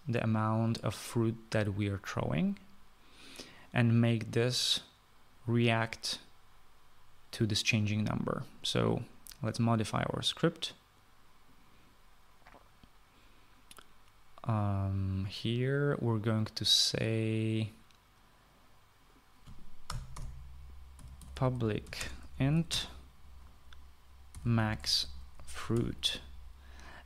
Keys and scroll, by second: 20.8 Return, 21.1 Return, 21.7-24.0 typing, 25.0-27.0 typing.